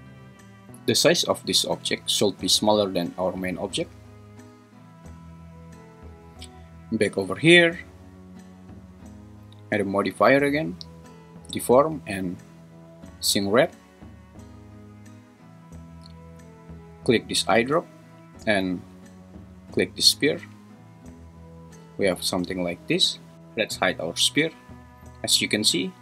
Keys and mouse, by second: 1.6 g, 2.2 Escape, 7.1 click, 7.9 click, 8.9 click, 9.8-13.3 drag.